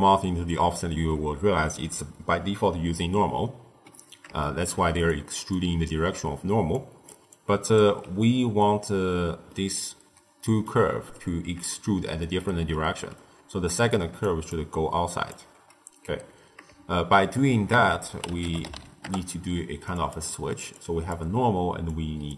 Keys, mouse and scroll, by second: 4.3-4.9 shift+middle drag, 4.9-8.6 typing, 5.0 click, 5.4 click, 6.7 click, 7.2-7.7 drag, 9.4-13.8 middle drag, 13.8 d, 14.1 click, 14.4 d, 14.6-15.2 drag, 15.2 d, 17.6 ctrl+a, 20.2-20.7 middle drag, 20.7 click, 21.8 drag.